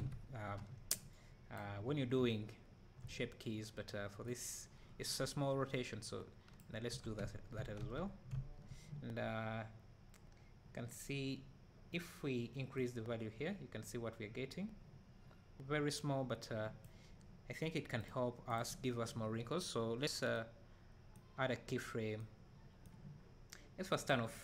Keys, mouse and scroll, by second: 0.0 alt+a, 2.1 b, 2.2 `, 4.3-18.6 drag, 6.9 Tab, 20.8-24.4 right drag.